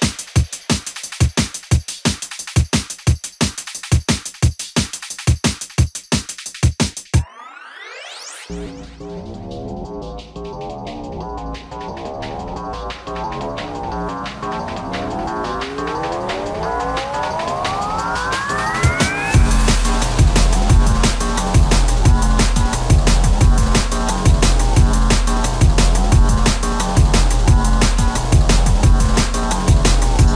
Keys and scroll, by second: 2.0 shift+a, 2.8 alt+t, 4.7 shift+q, 21.4 space, 26.0 shift+m, 26.8 space, 29.4 Left, 29.4 c, 29.8 Right.